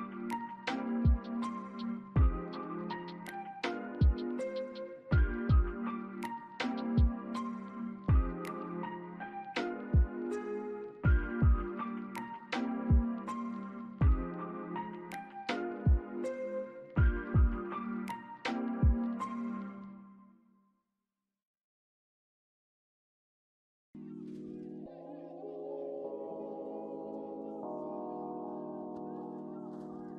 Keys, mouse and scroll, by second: 0.3 scroll up 1, 0.8 alt+middle click, 1.1 alt+click, 3.5 scroll up 1, 3.8 alt+click, 8.2 double click, 9.1 right click, 13.4 alt+click, 15.0 ctrl+z, 17.5 double click, 19.1 alt+click, 20.6 double click, 20.9 scroll down 1, 21.8 double click, 22.5 scroll down 1, 23.9 alt+middle click, 24.2 alt+click, 24.9 alt+middle click, 25.0 alt+scroll up 1, 25.9 alt+click, 27.4 alt+click.